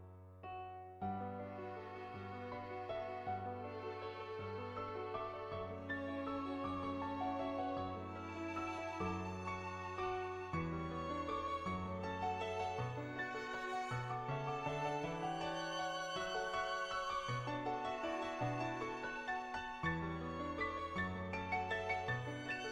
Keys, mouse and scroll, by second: 0.8 ctrl+z, 1.0 [, 1.1 [, 1.6-2.9 drag, 3.1 click, 3.1 [, 6.6 click, 8.4 [, 8.6 click, 8.6 [, 9.3 ctrl+z, 9.5 click, 9.9 [, 10.0 click, 11.3 click, 12.0 click, 19.0 ], 19.0 ], 19.3 click, 19.3 ], 19.6 ctrl+z, 19.8-21.4 drag, 21.5 ctrl+z, 21.8-22.7 drag.